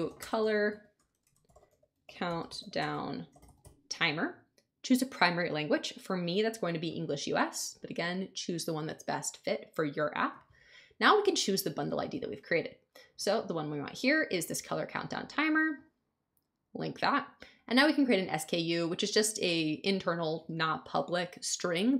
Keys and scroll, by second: 0.0-4.0 typing.